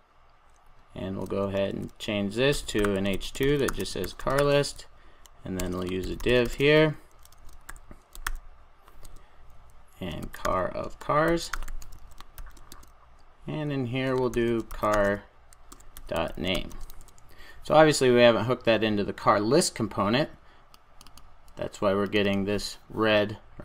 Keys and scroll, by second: 1.6 super+a, 9.0 Return, 16.9 super+s.